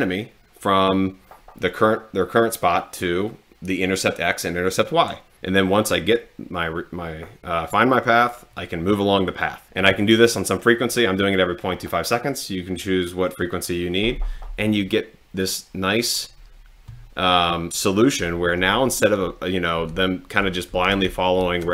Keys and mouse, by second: 16.1 click, 19.0 Right, 19.8 Down, 21.0 Down, 21.6 Down.